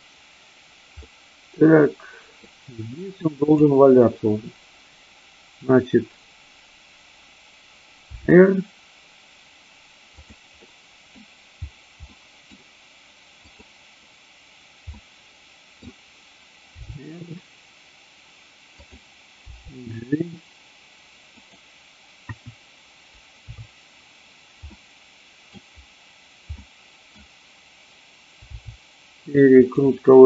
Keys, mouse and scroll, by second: 1.0-2.4 middle drag, 8.1 r, 10.7 middle click, 12.0-12.5 middle drag, 12.5-13.3 scroll down 1, 13.3-14.3 drag, 14.9-15.8 middle drag, 16.8 r, 18.8 click, 19.4 g, 21.4 click, 22.3 KP_1, 23.4 KP_3, 24.7 scroll up 1, 24.9 middle click, 26.7 middle click, 28.4 r, 29.7 click.